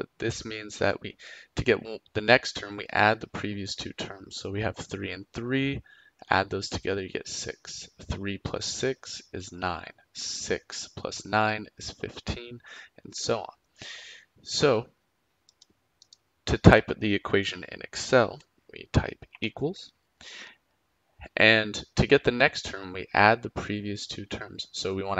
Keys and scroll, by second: 19.3 =.